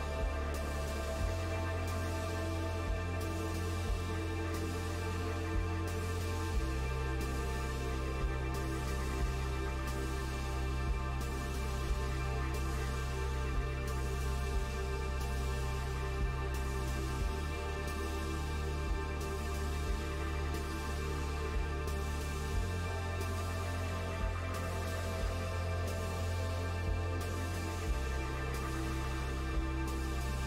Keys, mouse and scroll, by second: 11.0 KP_Decimal, 12.2-13.9 shift+middle drag, 13.9 s, 16.7 KP_Decimal, 17.4 shift+middle click, 18.2-18.9 scroll down 1, 18.9 s, 21.3 KP_7, 22.3-23.4 scroll up 1, 23.4-26.7 right drag, 23.4-26.0 scroll up 2, 26.7-27.8 shift+middle drag, 27.8 g, 30.0 r.